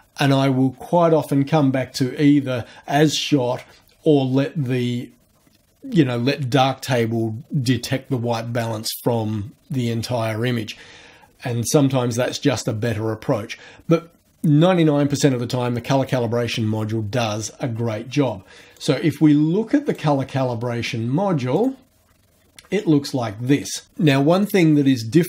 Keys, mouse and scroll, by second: 18.7 click, 19.9 click, 21.5 click.